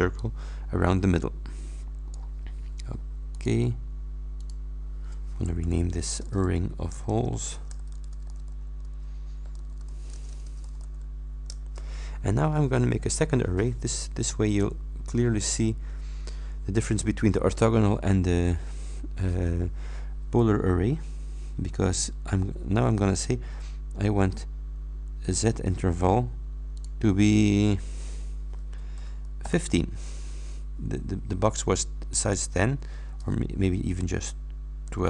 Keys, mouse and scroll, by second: 0.1-2.4 middle drag, 3.4-3.7 scroll up 2, 4.4-4.8 scroll up 2, 5.7 F2, 6.2-11.9 typing, 14.6 click, 23.2 click, 26.8 click, 29.5 shift+9, 33.2 BackSpace.